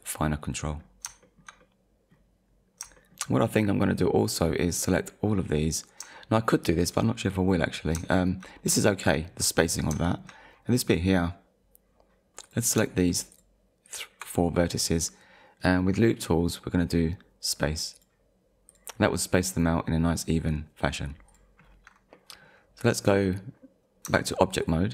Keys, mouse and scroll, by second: 0.7 scroll down 1, 1.2 shift+middle click, 1.6 middle click, 2.5 scroll up 1, 3.0 shift+middle click, 3.9 middle click, 5.7 click, 6.2 shift+middle click, 6.9 click, 7.1 middle click, 8.1 shift+middle click, 10.1 shift+middle click, 10.4-11.2 scroll up 2, 12.4 click, 13.0 ctrl+click, 13.9 ctrl+click, 15.6 right click, 17.9 click, 18.7 click, 21.3 click, 21.6-22.0 scroll down 1, 22.1 middle click, 24.1 Tab, 24.6 click.